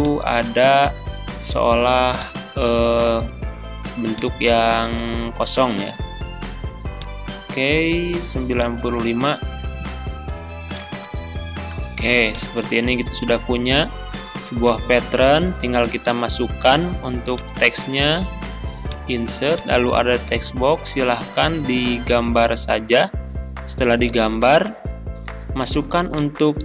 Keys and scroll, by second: 10.3 9, 10.6 5, 10.9 Return, 15.6 Delete.